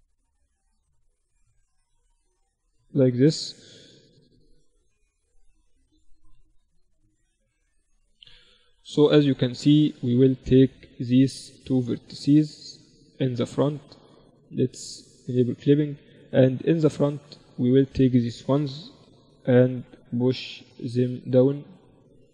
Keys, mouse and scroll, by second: 2.2 z, 2.6 z, 2.8-5.8 middle drag, 4.6 a, 6.9 middle click, 9.1-10.8 right drag, 10.5 z, 12.1 middle click, 14.1-16.6 drag, 15.4-19.2 right drag, 16.4 a, 18.0 KP_1, 18.2 z, 19.8-21.6 drag, 22.2-22.3 middle drag.